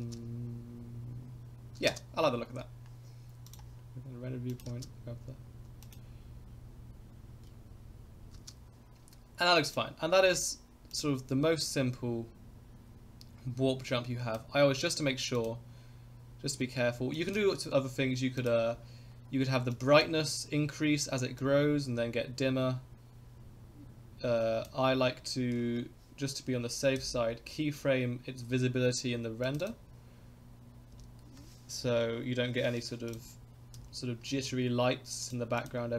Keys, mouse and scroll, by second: 0.0 space, 1.9 space, 3.5 click, 4.5 click, 4.7 space, 5.9 click, 8.5 space, 9.7 click, 10.3 ctrl+s, 11.0-14.4 drag, 15.4 click, 17.2 click, 18.4 click, 19.8 click, 21.4-24.7 drag, 27.0 i, 29.4 click, 30.9 i, 31.9 Right, 33.1 click, 33.7 i, 35.2 click, 35.6 click.